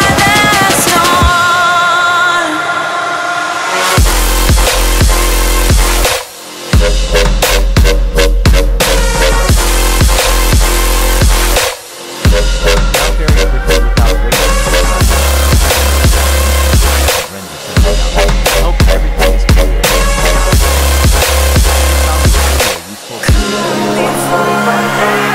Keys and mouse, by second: 1.4 middle click, 2.3 click, 3.7 ctrl+space, 12.9 ctrl+space, 13.0 ctrl+space, 13.6-14.9 typing, 15.1 ctrl+space, 15.3 click, 15.9 middle click, 16.8 shift+a, 17.4 s, 18.7 click, 19.8 z, 20.0 click, 20.3 click, 20.6 click, 21.5 click, 22.7 click, 24.6 click, 24.6 space.